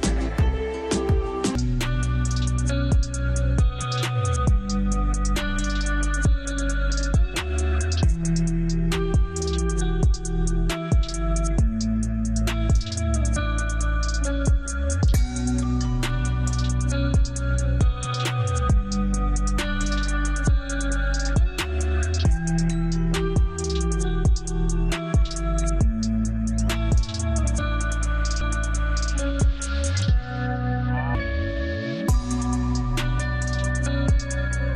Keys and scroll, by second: 1.7 ctrl+z, 3.1 Escape, 7.1 shift+F2, 7.5 shift+Page_Up, 7.8 F3, 9.2 Escape, 12.4 ctrl+r, 12.9 ctrl+r, 16.0 Escape, 22.7 F3, 23.8 ctrl+g, 24.4 e, 24.8 Escape.